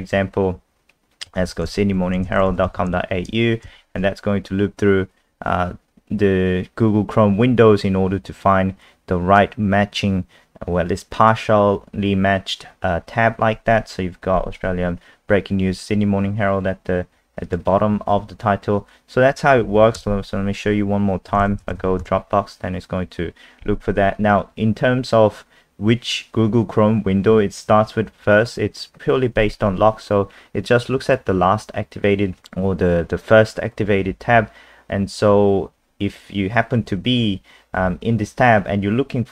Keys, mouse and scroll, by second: 1.0-3.4 typing, 3.6 Return, 17.4 click, 20.0 KP_0, 21.0-22.3 typing.